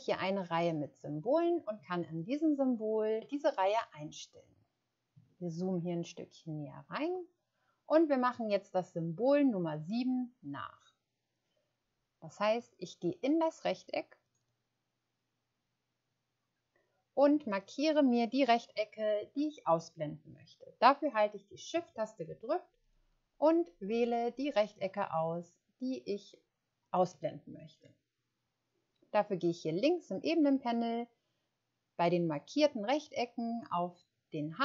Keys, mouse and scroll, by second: 12.5 click, 22.8 shift+click, 26.8 shift+click.